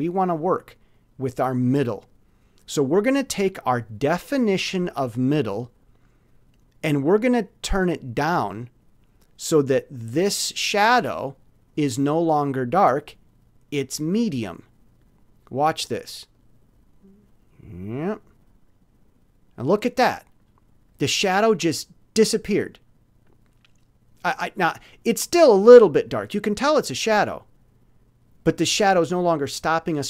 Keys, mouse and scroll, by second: 16.3-18.9 drag.